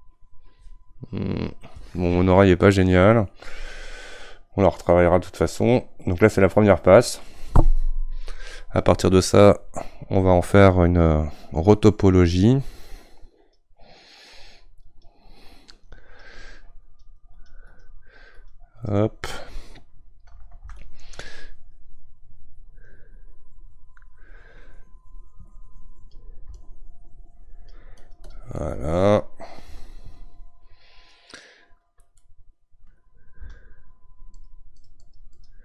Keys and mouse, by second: 12.9-28.6 drag, 28.6-34.4 middle drag, 34.4-35.6 shift+drag.